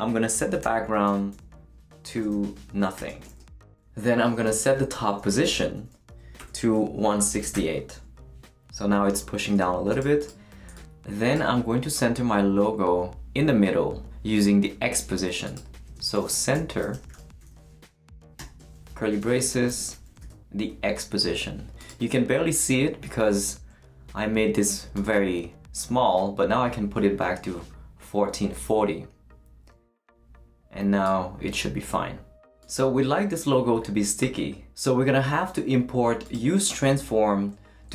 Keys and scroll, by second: 0.1-8.0 typing, 16.1-20.9 typing.